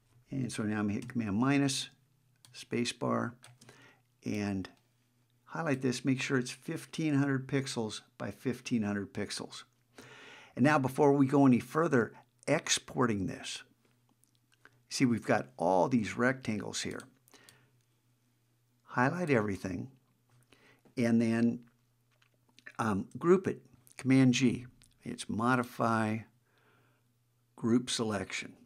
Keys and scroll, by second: 1.0 super+-.